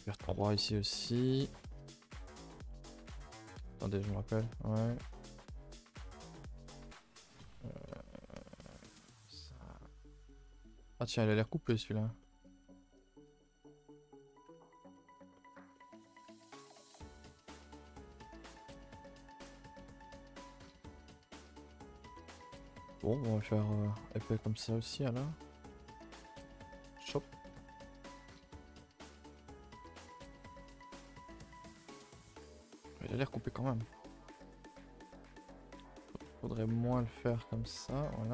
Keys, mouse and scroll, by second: 0.2 shift+middle click, 0.7 middle click, 1.4 shift+click, 1.6-2.8 shift+middle drag, 2.8 e, 3.6 KP_0, 4.1 shift+middle click, 4.8 g, 6.5 s, 7.8 r, 9.7 g, 10.3 e, 11.4 middle click, 11.8-12.2 scroll up 5, 12.2 middle click, 12.4-13.0 scroll up 5, 13.0 shift+middle click, 13.3 scroll down 1, 13.4 middle click, 13.8 s, 14.5 g, 14.9 middle click, 15.5 scroll up 2, 15.7 middle click, 16.2 g, 16.8 KP_0, 17.4 shift+middle click, 17.6 scroll up 1, 24.5 scroll down 2, 24.6 middle click, 24.9-25.6 scroll up 8, 25.6-26.7 middle drag, 26.7 click, 27.0 Tab, 27.2-27.6 middle drag, 27.6 a, 27.7 a, 28.1 KP_0, 28.8 shift+middle click, 29.1 scroll up 2, 32.7 click, 33.1 middle click, 33.6-34.7 scroll up 12, 34.2 shift+middle click, 34.7 shift+middle click, 35.5 click, 35.8 g, 36.5 click, 37.0 g, 38.1 middle click.